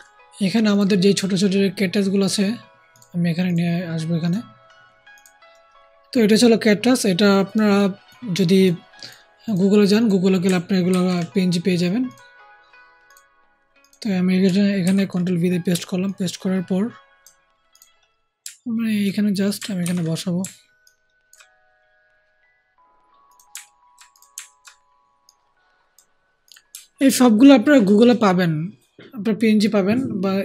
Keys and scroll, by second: 10.8 ctrl+c, 14.7 ctrl+v, 19.7 ctrl+alt+t.